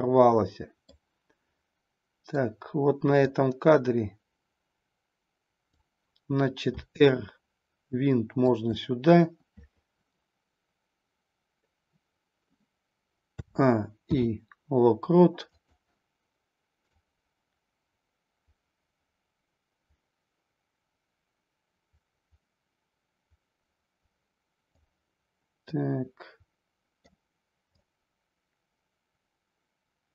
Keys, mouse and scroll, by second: 0.9-2.5 middle drag, 3.1-5.9 drag, 6.8 r, 8.5 click, 13.4 a, 14.0 i, 17.0-24.7 drag, 25.6-27.0 middle drag, 27.8 click.